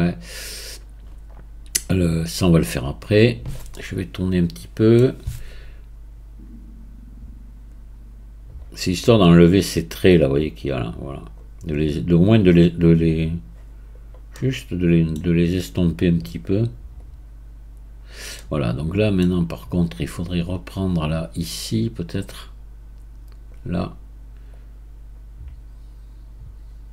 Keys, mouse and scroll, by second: 3.7-5.5 middle drag, 5.5-9.1 right drag, 9.1-12.6 drag, 12.6-15.1 right drag, 15.1-15.6 middle drag, 15.6-17.0 right drag, 17.0-18.4 drag, 18.4-19.8 middle drag, 19.8-24.5 right drag, 24.5-26.9 drag.